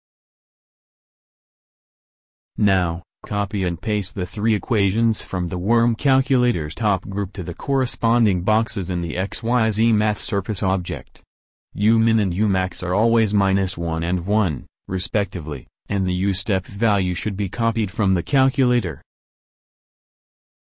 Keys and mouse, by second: 0.4 alt+Tab.